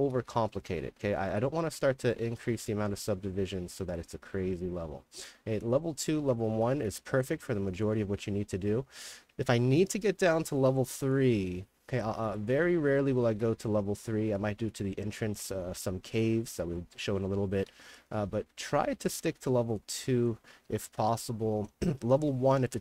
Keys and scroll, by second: 0.0-1.7 typing, 6.0-9.4 typing, 12.3-18.2 typing, 18.5 ctrl+z, 20.7 s, 21.1 w, 22.3-22.8 typing.